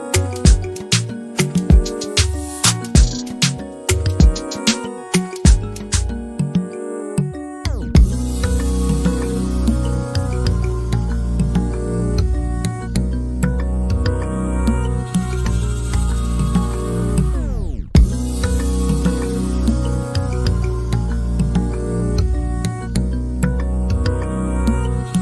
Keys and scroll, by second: 10.8 Delete, 13.9 p, 17.1-18.2 typing, 19.7 typing, 22.9 m.